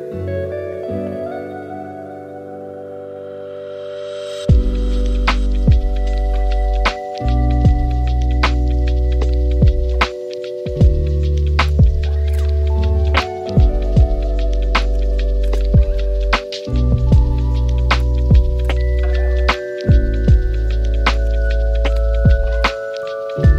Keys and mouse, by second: 1.8-3.3 middle drag, 3.9 r, 6.0 middle click, 7.0 middle click, 8.2 r, 9.5 g, 12.8 middle click, 13.4 shift+d, 15.1 shift+middle drag, 15.5 middle drag, 16.1 g, 17.0 r, 18.9 g, 20.6 g, 22.2 middle click, 23.3 g.